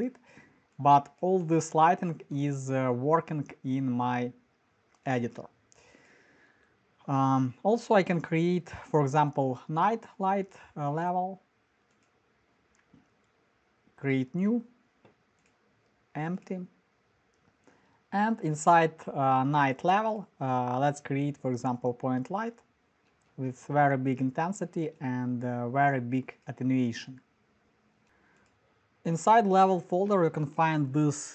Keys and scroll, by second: 17.2 Return, 17.2 typing, 23.0 f, 28.0 Return, 28.0 0.